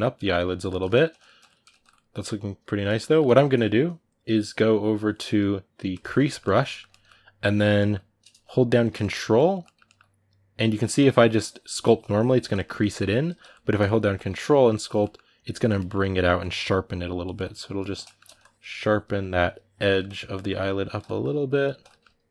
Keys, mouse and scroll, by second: 5.7 click, 6.0-8.4 ctrl+middle drag, 8.4 ctrl+click, 8.8 shift+middle click, 9.1 ctrl+click, 9.4-10.7 ctrl+middle drag, 10.7-12.4 drag, 12.4 middle click, 13.2 ctrl+z, 13.3-14.6 middle drag, 14.6 ctrl+click, 14.8 middle click, 15.3 ctrl+click, 15.5 ctrl+middle click, 16.0-17.3 ctrl+drag, 17.3 middle click, 17.6 ctrl+click, 17.8 shift+middle click, 18.2-19.7 ctrl+drag, 19.7 middle click, 19.9 ctrl+click, 20.8 ctrl+middle click, 21.2 ctrl+click, 21.6 middle click, 22.1 ctrl+click.